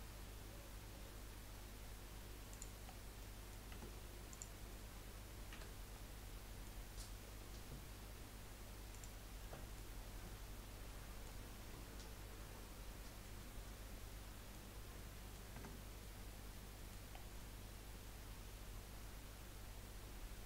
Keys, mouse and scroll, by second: 2.9-3.2 scroll down 3, 3.2 middle click, 3.7 Tab, 4.3 click, 5.5 h, 6.0-9.0 middle drag, 9.0-9.4 drag, 9.4-10.0 middle drag, 10.0 scroll down 4, 10.2-13.4 middle drag, 14.1-14.7 middle drag, 14.7 scroll up 4, 14.9-15.5 middle drag, 15.5 Tab, 16.0-17.1 middle drag, 17.1 scroll down 3, 17.4-20.4 middle drag.